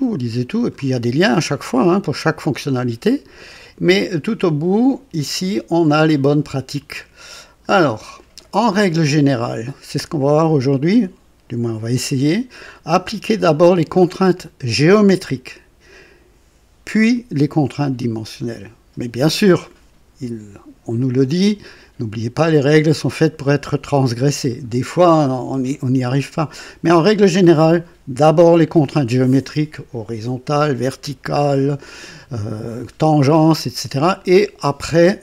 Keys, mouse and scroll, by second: 3.3 click, 3.5-5.5 scroll down 2, 5.5-7.8 drag.